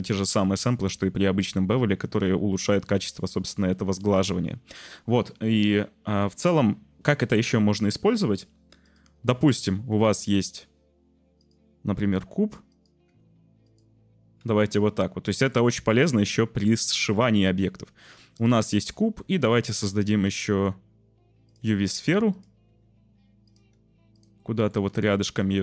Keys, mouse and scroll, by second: 8.8 click, 9.7 shift+a, 12.1 s, 12.7 s, 13.0 g, 14.4 z, 15.0 click, 15.9 z, 17.6 click, 18.3 click, 18.9 z, 19.2 shift+a, 22.0 g, 22.3 click, 22.6 s, 23.4 click, 23.7 g, 24.1 click, 24.4 click, 24.8 g, 25.2 click, 25.4 s.